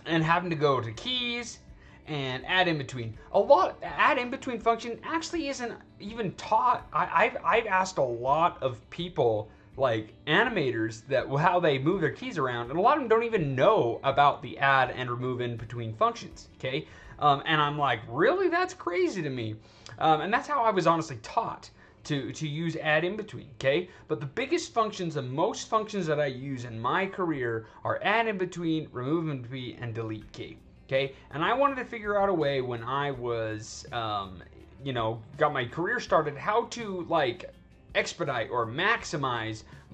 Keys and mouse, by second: 3.9 click, 21.7 click.